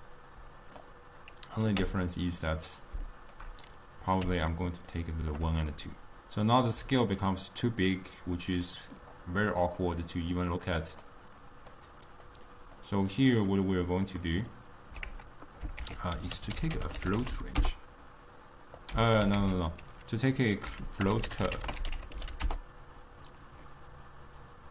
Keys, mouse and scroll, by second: 0.8-2.1 drag, 4.4-5.8 shift+drag, 5.8-19.0 ctrl+middle drag, 19.0 x.